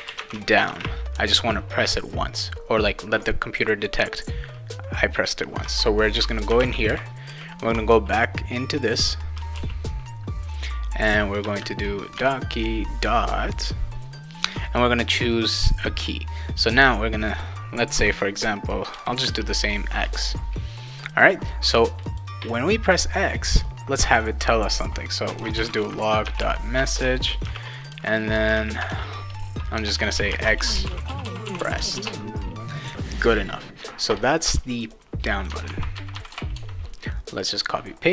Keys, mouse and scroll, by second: 0.0-1.1 typing, 6.1-8.1 typing, 9.1-10.0 typing, 11.4 Return, 12.1 ., 19.3 shift+x, 22.0 click, 23.5 click, 25.1-32.1 typing, 34.9 click, 35.7 ctrl+c, 35.9 ctrl+v, 36.1 ctrl+v, 36.3 ctrl+v, 37.4 click, 37.5 click.